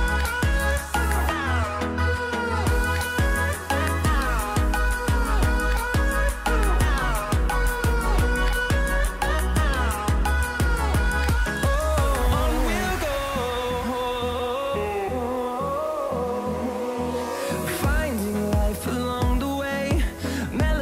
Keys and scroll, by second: 0.0-1.6 typing, 3.4-5.3 typing, 7.5-8.6 typing, 9.9-15.1 typing, 18.5 Tab, 19.4 shift+a.